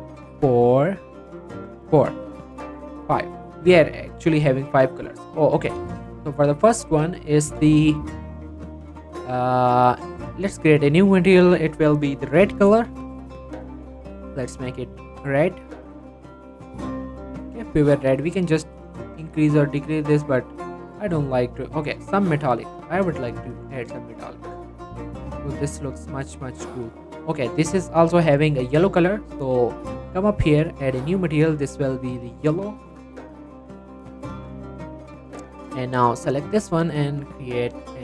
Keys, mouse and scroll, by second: 4.4 click, 5.2 right click, 5.6 click, 5.9 shift+middle click, 6.1 shift+scroll up 1, 6.4 middle click, 6.8-7.2 scroll down 1, 7.2 middle click, 8.1 click, 9.7 right click, 10.0 click, 12.2 shift+r, 12.4 shift+e, 12.6 d, 13.0 Return, 14.5-17.2 drag, 17.7-18.3 scroll up 1, 18.3-19.6 drag, 19.6 right click, 20.2 click, 20.5 right click, 21.2-24.1 drag, 24.3 scroll down 1, 24.5 middle click, 25.1-25.4 scroll up 1, 25.4 middle click, 25.8 shift+middle click, 27.3 click, 27.6-28.5 scroll up 1, 29.6 click, 33.0-34.0 typing, 34.6 Return, 36.2-38.0 drag.